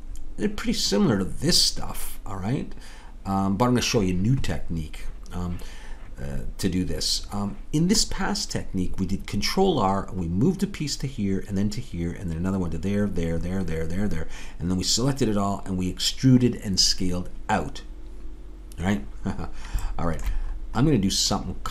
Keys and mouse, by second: 0.1-4.5 middle drag, 19.9 middle click.